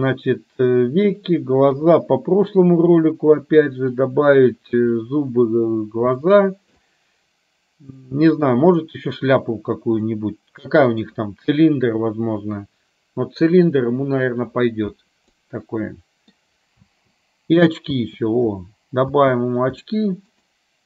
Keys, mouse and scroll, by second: 1.8 KP_3, 3.0 middle click, 6.4 shift+middle click, 8.0 middle click, 10.2 middle click, 15.5 middle click, 16.9 space, 18.0 space, 19.3 space, 20.0 shift+middle click, 20.5 shift+middle click.